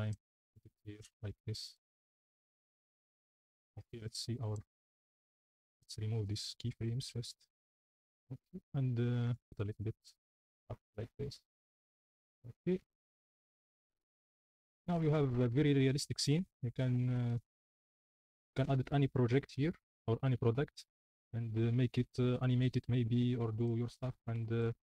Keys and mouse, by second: 0.0-0.5 typing, 2.2 shift+d, 2.2 x, 4.2 click, 6.5 a, 6.7 x, 7.9 space, 9.2-10.4 typing, 12.9 a, 13.1 x, 13.7 space, 16.1 space, 18.3 click, 22.4 r, 24.2 drag.